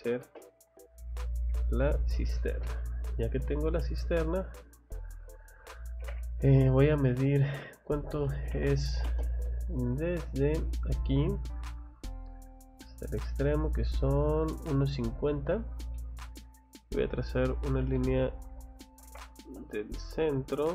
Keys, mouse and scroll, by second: 0.2 space, 0.6 click, 1.4 click, 3.0 click, 3.7 click, 5.8 scroll down 1, 6.0 Escape, 7.0 middle click, 7.0 scroll, 8.3 d, 9.1 space, 9.8 middle click, 11.3 click, 11.5 scroll down 1, 12.8 click, 14.2 click, 14.4-14.8 scroll up 1, 15.1 scroll down 2, 15.5 middle click, 15.9 middle click, 16.5 scroll up 2, 17.8 space, 18.9 Escape, 19.5 F5, 20.6 l.